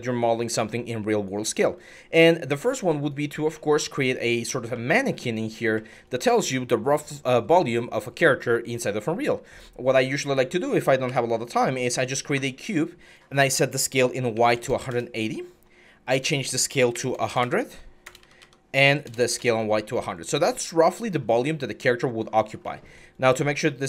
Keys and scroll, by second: 10.9 w, 14.1-14.5 typing, 14.7 Return, 16.7-18.9 typing, 18.0 Tab, 18.2 Tab, 19.2 Return.